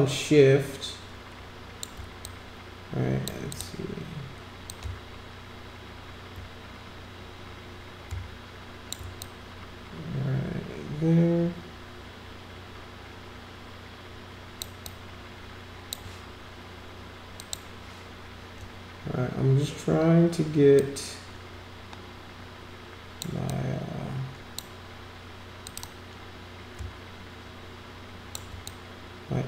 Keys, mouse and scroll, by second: 2.2-3.3 drag, 3.5 click, 4.7-8.9 shift+drag, 9.2-14.5 drag, 14.8-15.9 drag, 17.4 click, 20.7-23.2 drag, 23.5-24.5 drag, 25.6 click, 25.8-28.3 drag, 28.7-29.4 drag.